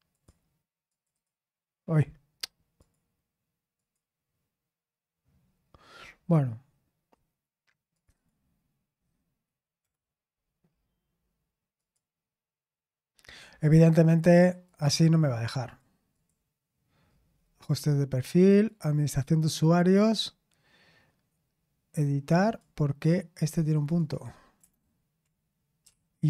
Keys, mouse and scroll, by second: 0.1 click, 0.9 click, 1.9-2.8 scroll down 2, 2.8 click, 3.7 click, 5.5-7.5 scroll up 2, 7.5-7.9 scroll up 1, 7.9 click, 10.8-11.7 scroll down 1, 11.7 click, 13.2-14.0 scroll up 1, 14.6 click, 15.6-16.6 drag, 18.6 click, 22.4 click, 23.7 click, 24.0 click.